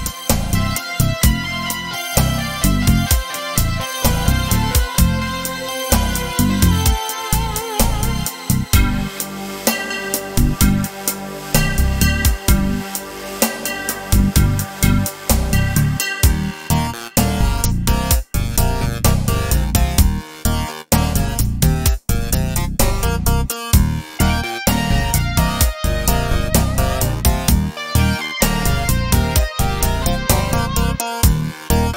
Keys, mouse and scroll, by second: 2.2-10.4 right drag, 10.4-31.9 drag.